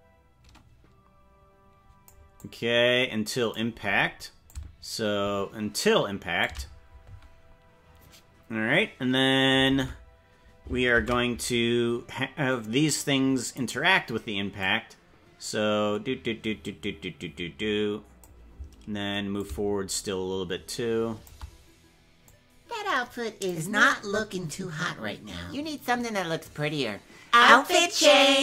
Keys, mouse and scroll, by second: 2.4-3.5 drag, 4.4-6.4 shift+drag, 9.7 ctrl+Tab, 12.8 ctrl+s, 13.6-14.6 right drag, 14.6-18.2 drag, 19.3-21.3 shift+drag, 22.2-23.5 drag.